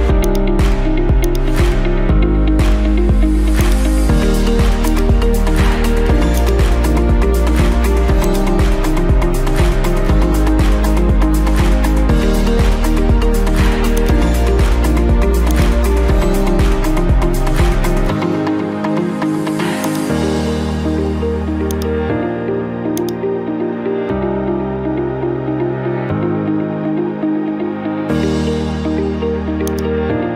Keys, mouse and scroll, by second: 0.4 click, 3.7 click, 5.0 click, 6.5 click, 8.4 click, 10.5 8, 11.0 Return, 14.1-15.2 drag, 15.6 click, 16.6-17.4 typing, 17.6 Return, 19.9-21.1 drag, 21.8-22.9 drag, 23.1-27.4 drag, 29.8 click.